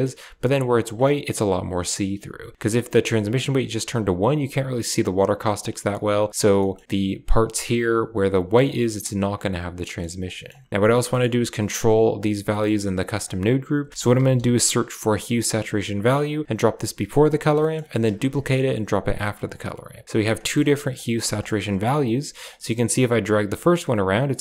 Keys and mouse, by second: 2.6 drag, 3.2 click, 5.5-6.0 drag, 6.6 shift+middle click, 9.3 click, 9.8 middle click, 10.2 middle click, 10.7 click, 11.0 middle click, 12.4 middle click, 13.2 click, 13.9 shift+a, 17.1 click, 17.5 middle click, 18.0 shift+d, 19.1 click, 20.0 click, 20.3 middle click, 20.9 click, 21.4 middle click, 22.4-24.4 shift+drag.